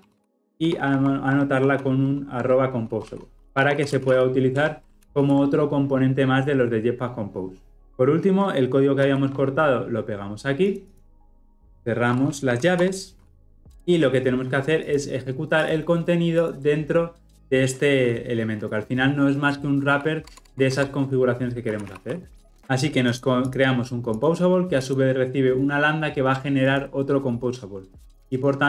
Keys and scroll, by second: 0.3 ctrl+v, 4.6 Return, 5.0 ctrl+alt+l, 5.2 ctrl+alt+o, 7.8 ctrl+z, 9.0 ctrl+z, 9.1 ctrl+shift+v, 13.7 ctrl+alt+o, 20.3 Tab.